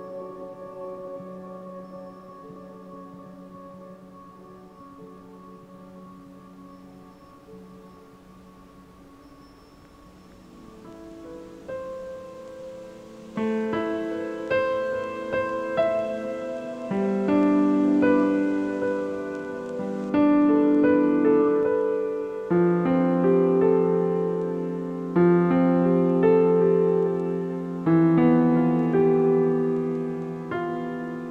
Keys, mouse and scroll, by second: 0.0 a, 0.1-1.2 middle drag, 1.2-1.8 scroll up 2, 1.8-4.6 shift+middle drag, 4.6-5.1 scroll up 1, 5.1-8.2 shift+middle drag, 9.3-10.4 middle drag, 10.4-11.6 scroll down 3, 11.6-14.6 shift+middle drag, 19.0-20.4 scroll down 1, 20.4 scroll up 1, 20.7-22.3 middle drag, 22.3 scroll up 2, 22.7-23.1 shift+middle drag, 23.1-23.5 scroll up 2, 23.5 z, 24.0 drag, 24.9 scroll down 1, 25.5 KP_7, 26.0-26.4 scroll down 1, 26.4 g, 27.8-28.3 shift+middle drag, 28.3 scroll up 1, 28.6 g, 30.9-31.3 scroll down 1.